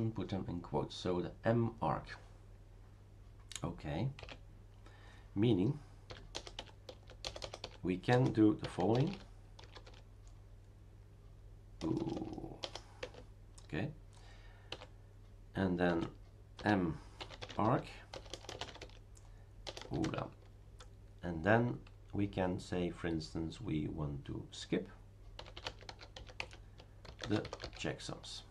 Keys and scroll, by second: 4.2 q, 5.8-10.3 typing, 11.8 BackSpace, 11.9 BackSpace, 12.1 BackSpace, 12.6 BackSpace, 13.0 Tab, 15.7-20.0 typing, 25.1-28.5 typing.